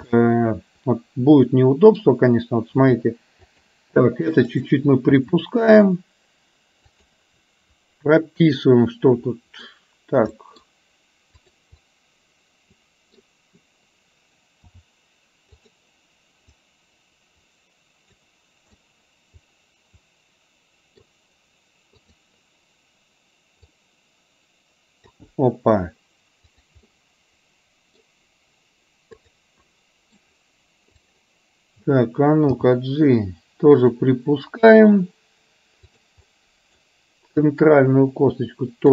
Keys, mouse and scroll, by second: 0.1 KP_3, 0.2-2.1 middle drag, 2.8 r, 6.1 r, 8.5-9.7 middle drag, 10.5-11.3 middle drag, 11.3 click, 12.0-13.3 middle drag, 14.7 r, 16.8-18.2 drag, 18.8-21.1 middle drag, 22.0-25.1 drag, 26.6-27.0 drag, 27.0-28.1 middle drag, 29.2 click, 29.7-30.2 middle drag, 31.0 click, 32.7 g, 36.3 middle click, 37.5-38.9 drag.